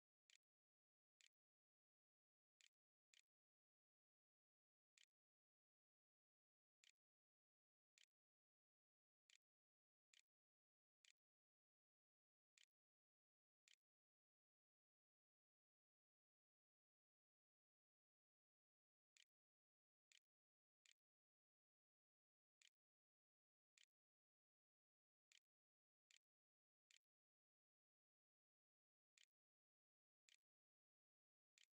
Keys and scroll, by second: 0.2-15.1 typing, 18.3-20.7 typing, 22.4 Tab, 23.6 ., 25.1-31.7 typing, 29.0 Tab, 30.5 shift+Up.